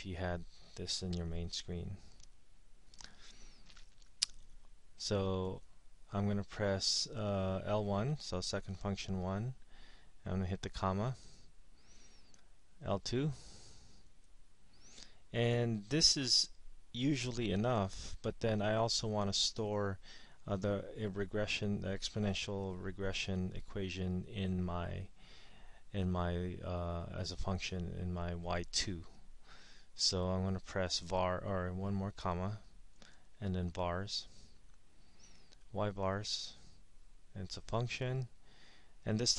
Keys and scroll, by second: 8.9 1, 11.4 ,, 14.4 2, 33.3 ,, 36.4 Right, 38.0 Return.